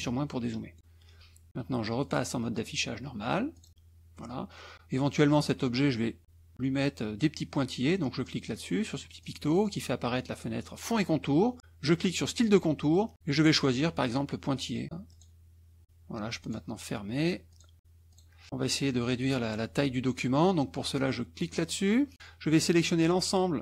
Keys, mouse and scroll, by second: 0.8 click, 1.0-2.1 scroll up 1, 2.1 click, 3.5 click, 9.2 click, 12.3 click, 13.5 click, 15.1 click, 16.4 click, 17.5 click, 18.1 click, 21.4 click, 22.1 middle click, 22.3 scroll up 1, 22.6 middle click.